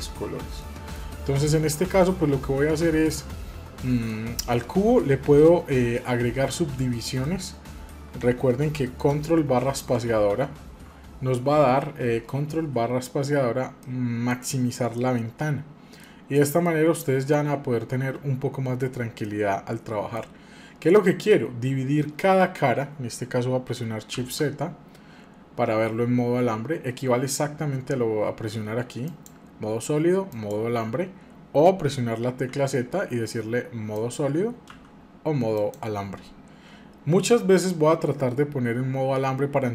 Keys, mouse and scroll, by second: 0.6-2.6 middle drag, 2.8 shift+middle click, 3.2-3.9 scroll up 4, 4.1 shift+middle click, 7.2 middle click, 10.0 ctrl+space, 13.8-14.5 shift+middle drag, 14.5 scroll down 2, 15.0-18.1 middle drag, 19.2-22.3 middle drag, 24.2 shift+z, 29.0-32.5 drag, 32.5 z, 34.6 z, 37.3-39.7 middle drag.